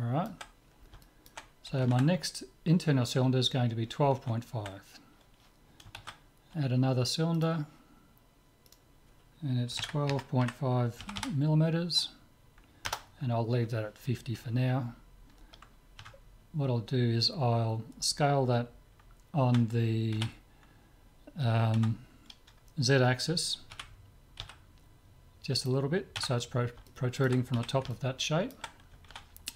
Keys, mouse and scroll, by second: 6.0 shift+a, 8.7-10.5 drag, 11.2 m, 16.0 Tab, 19.5 Tab, 20.3 z, 21.8 Tab, 23.7 s, 26.2 Tab, 26.9-29.5 middle drag, 27.6 z.